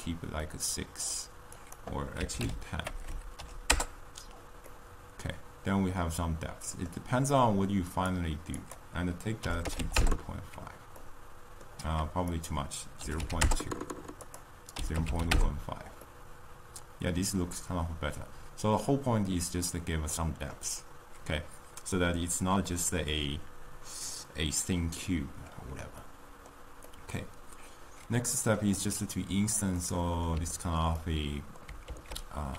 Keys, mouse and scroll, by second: 0.4-3.8 middle drag, 3.8 BackSpace, 4.6-10.0 middle drag, 10.0-10.9 drag, 10.9-13.5 middle drag, 13.5-15.9 drag, 15.9-19.2 middle drag.